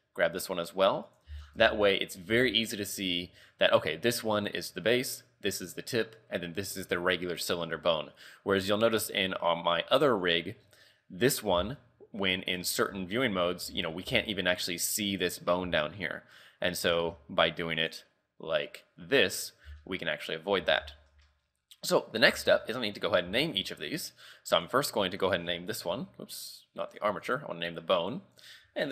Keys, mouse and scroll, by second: 1.3 z, 1.4 scroll down 6, 1.7 Tab, 2.0 scroll up 5, 2.3 z, 8.2-8.9 scroll down 4, 10.3 click, 10.6 scroll up 6, 11.3 right click, 11.6 z, 11.7-12.1 scroll down 5, 12.2-12.6 scroll up 3, 12.8 ctrl+Tab, 13.2 scroll down 3, 13.7 z, 13.9 scroll up 3, 14.1 z, 15.7 z, 17.0 ctrl+Tab, 17.8 click, 18.7 click, 19.4 right click, 19.7 z, 19.8-20.3 scroll down 3, 20.3-20.6 scroll up 5, 20.6 z, 21.0 shift+middle click, 22.3 Tab, 22.7 shift+middle click, 23.0 scroll down 4, 23.3 a, 23.7 shift+middle click, 24.0 scroll up 3, 24.3 a, 24.6 right click, 25.3 click, 27.3 click, 28.0 click, 28.4 click.